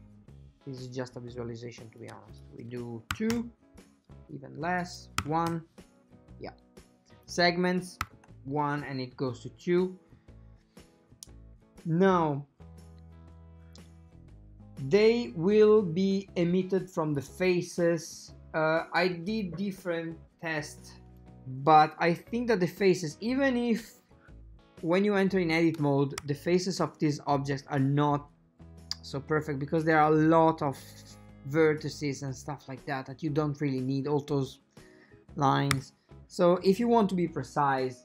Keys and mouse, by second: 2.5-3.9 drag, 5.0-6.2 drag, 5.8 KP_Divide, 7.5-8.9 drag, 10.5 middle click, 16.6-18.0 drag, 21.2-23.4 drag, 24.1 click, 26.2 Tab, 28.7-30.0 ctrl+middle drag, 35.8 Tab.